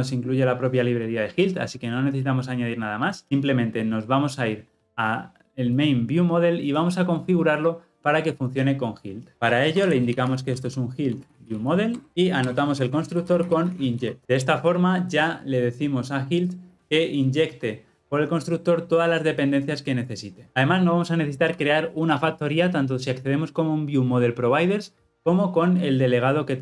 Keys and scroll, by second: 9.3 ctrl+F8, 11.9 Return, 14.2 alt+Return.